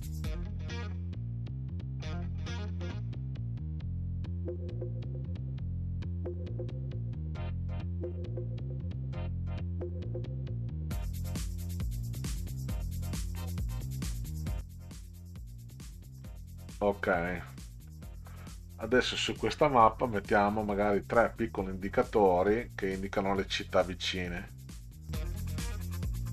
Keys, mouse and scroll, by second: 0.1 click, 0.6 drag, 0.8 middle click, 1.4 middle click, 1.6 middle click, 1.8 middle click, 1.9 click, 2.1 drag, 2.7-3.4 drag, 3.6 ctrl+click, 4.1 click, 4.8 middle drag, 4.9 ctrl+scroll up 2, 5.6 middle click, 5.9 click, 6.4 click, 7.4 click, 7.8 ctrl+scroll up 2, 8.9 click, 9.2 ctrl+click, 9.6 click, 10.2 ctrl+click, 10.8 click, 11.7-12.5 ctrl+scroll up 2, 12.5 click, 12.9 middle click, 13.2 middle click, 13.3 middle click, 14.0 middle click, 14.4 ctrl+click, 17.9-18.3 middle drag, 24.1 click, 25.3 click, 25.5-26.3 typing.